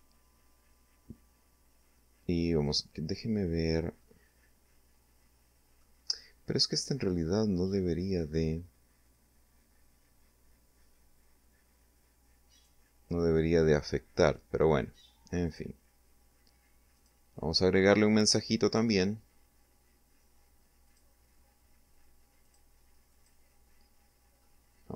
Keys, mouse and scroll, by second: 1.6 right click, 3.0-4.9 middle drag, 11.5 right click, 14.4 click, 16.0 click, 22.1 click, 23.4 middle click.